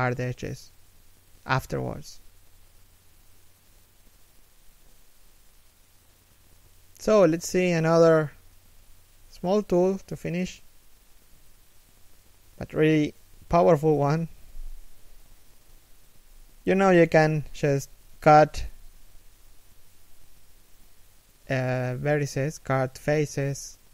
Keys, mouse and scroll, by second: 0.4 right click, 2.4 shift+middle click, 3.4 scroll down 1, 4.0 shift+middle click, 6.4 alt+shift+middle click, 7.6 a, 8.1 scroll up 1, 8.6 a, 9.1 scroll down 1, 9.4 a, 10.1 shift+middle click, 12.2 scroll up 1, 12.9 alt+right click, 13.2 g, 13.9 a, 14.1 right click, 14.2 g, 14.9 right click, 15.1 g, 19.7 z, 20.4 middle click, 21.2 z, 21.4 middle click, 21.9 z, 22.2 middle click, 23.3 z, 23.6 middle click.